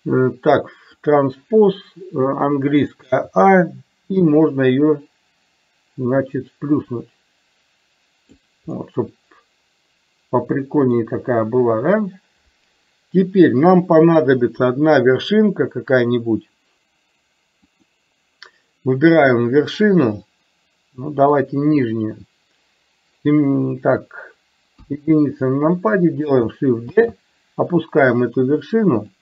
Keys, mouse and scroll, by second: 1.1 click, 3.1 a, 4.6-8.3 drag, 8.8-11.1 middle drag, 17.7 click, 21.3 click, 24.8 KP_1, 27.1 shift+d.